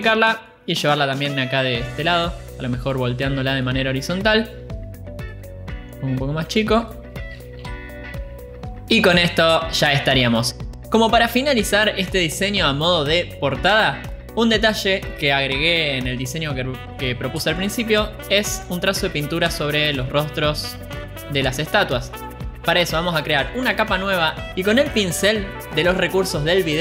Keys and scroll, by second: 0.5 ctrl+j, 1.4 ctrl+t, 8.4 Return, 9.0 ctrl+z.